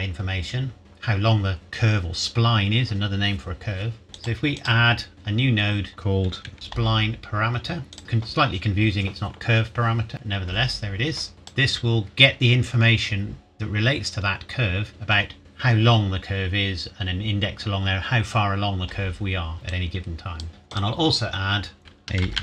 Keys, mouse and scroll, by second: 4.1 click, 7.9 click, 11.3 click, 13.3-14.9 scroll down 1, 19.3-19.7 scroll down 1, 19.7 click, 22.2-22.4 typing.